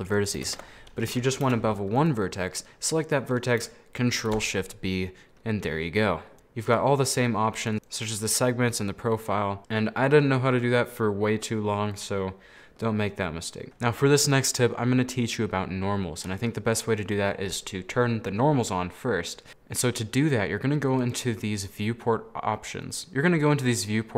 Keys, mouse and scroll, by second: 0.6 ctrl+z, 2.1 right click, 2.5-4.3 middle drag, 4.3 ctrl+shift+b, 6.7 click, 7.8-9.6 drag, 13.2-13.6 scroll up 1, 13.6 middle click, 14.2 scroll up 2, 14.4 middle click, 14.6 scroll down 1, 14.7-17.8 middle drag, 19.9-21.1 drag.